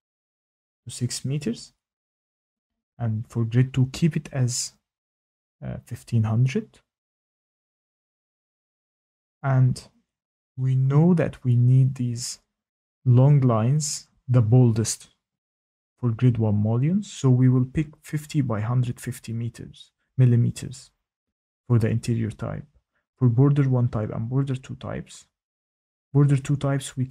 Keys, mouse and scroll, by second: 0.1 click, 3.1 click, 3.8 typing, 7.3 click, 9.7 scroll, 19.0 click, 23.7 click.